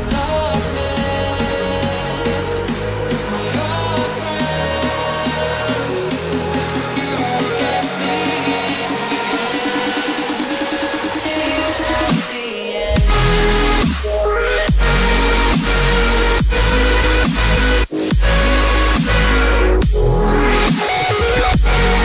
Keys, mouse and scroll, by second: 0.1 double click, 0.8 click, 1.6 scroll down 1, 2.3 click, 2.7 ctrl+c, 2.9 ctrl+v, 3.9 click, 7.7 ctrl+c, 7.8 ctrl+v, 8.6 click, 11.1 scroll up 1, 11.5 click, 12.2 scroll down 1, 14.7 click, 15.1 ctrl+c, 15.3 ctrl+v, 16.1 click, 20.6 click, 21.0-21.4 scroll down 1, 21.4 scroll up 1, 21.9 click.